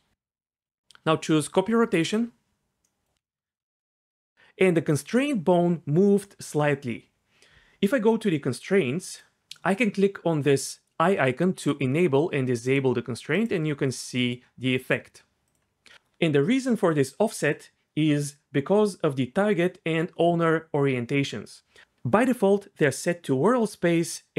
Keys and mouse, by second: 2.0-2.8 drag, 9.0 click, 11.6 click, 12.6 click, 13.3 click, 14.0 click, 14.8 click, 15.4 click.